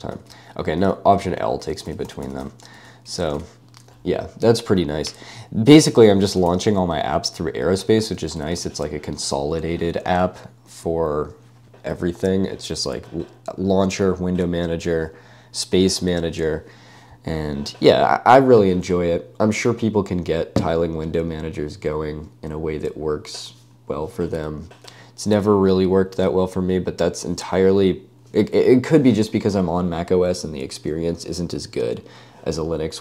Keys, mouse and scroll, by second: 0.1 ¬, 0.9 alt+a, 1.1 alt+l, 1.4 alt+a, 1.6 alt+l, 1.7 alt+a, 1.9 alt+l, 1.9 alt+a, 2.1 alt+l, 2.1 alt+a, 2.4 alt+l, 2.5 alt+l, 2.8 alt+a, 3.2 Escape, 3.8 w, 5.6-6.6 typing, 7.1 Escape, 7.8 g, 8.5 Escape.